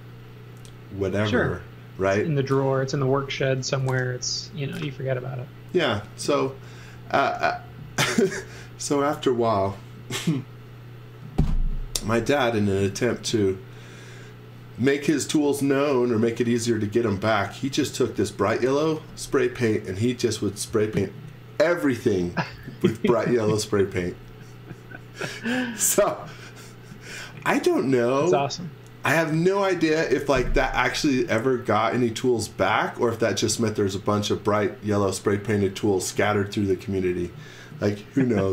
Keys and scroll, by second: 26.9 z.